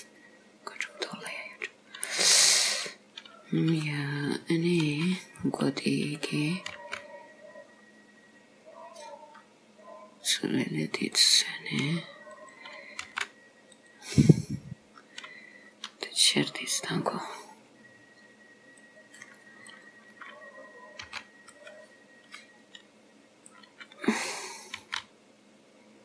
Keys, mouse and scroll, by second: 1.4 middle click, 1.4-2.0 scroll down 1, 2.6 click, 4.8 click, 6.1 click, 6.8 g, 12.3 click, 13.1 g, 18.8 click, 19.7 click, 21.1 b, 24.8 s.